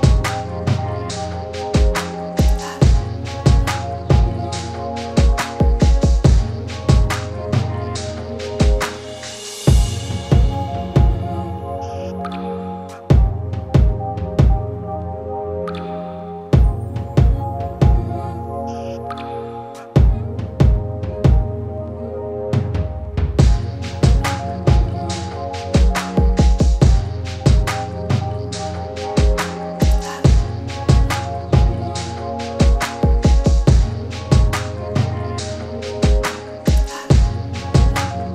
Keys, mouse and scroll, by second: 1.5-23.5 drag, 30.7-38.3 drag.